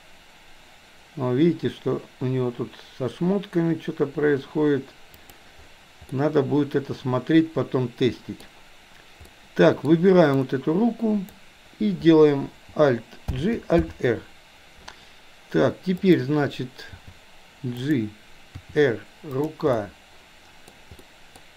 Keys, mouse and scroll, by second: 6.2-8.6 middle drag, 9.4-9.9 middle drag, 10.4-11.4 drag, 13.4 alt+g, 13.7 alt+r, 16.0 click, 17.0 g, 18.6 r, 19.7-20.9 middle drag, 21.0-21.4 middle drag.